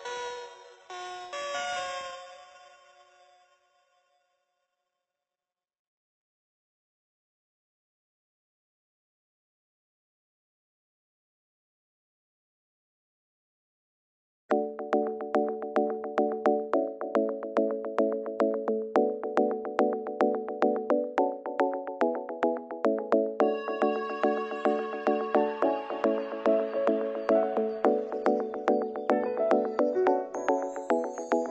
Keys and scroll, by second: 10.2 ctrl+-, 12.5 ctrl+0.